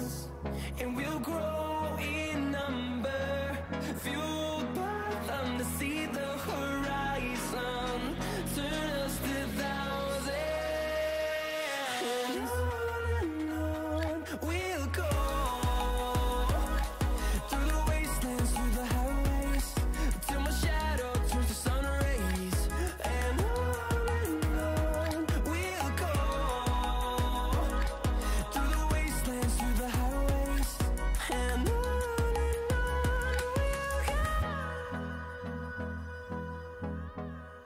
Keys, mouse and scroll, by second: 2.2-3.9 drag, 11.6 click, 14.2-15.2 drag, 15.2 scroll down 1, 18.8-20.3 drag, 23.5-34.8 drag, 35.1 click, 37.2 right click.